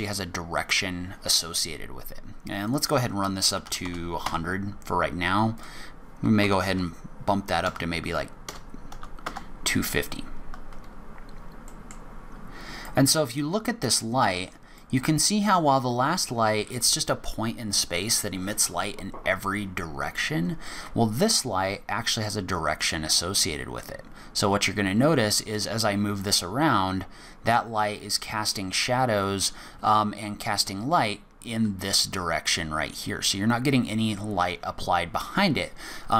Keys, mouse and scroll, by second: 2.6 click, 3.8 KP_0, 5.5 click, 11.7 middle click, 12.2-12.8 scroll up 2, 12.8 middle click, 14.8 middle click, 22.5 click.